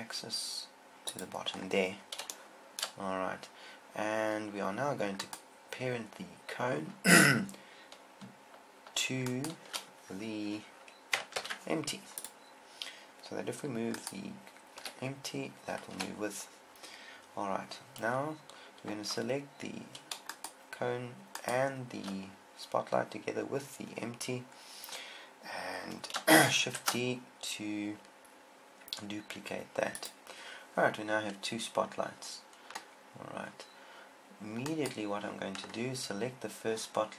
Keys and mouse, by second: 1.6 click, 2.1-5.3 drag, 5.6-9.1 right drag, 11.8 ctrl+p, 12.7 ctrl+p, 15.2 g, 20.8-23.7 right drag, 27.1 shift+d, 30.4-32.3 drag, 35.2-37.1 right drag.